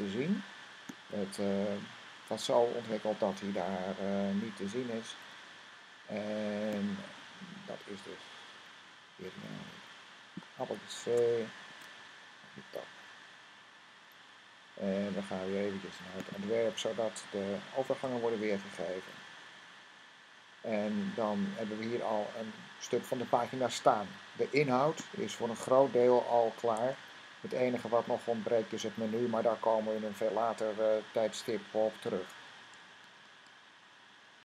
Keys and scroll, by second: 11.0 c, 11.6 Tab, 17.7 v, 26.7 s.